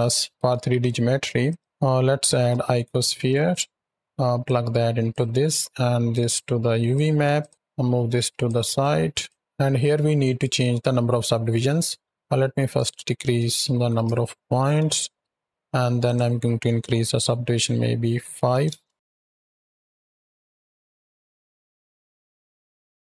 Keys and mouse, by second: 0.2 click, 0.3 shift+a, 0.5 shift+a, 4.3-5.0 drag, 6.0-6.8 drag, 7.2-8.3 drag, 7.5 ctrl+z, 7.5 x, 8.7 drag, 9.1 drag, 9.4 shift+Left, 9.4 ctrl+s, 12.6-14.6 drag, 14.0 shift+Right, 15.9-18.5 drag, 19.2 shift+Right, 19.3 shift+Left, 20.2 space, 21.2-21.9 drag, 22.4 click.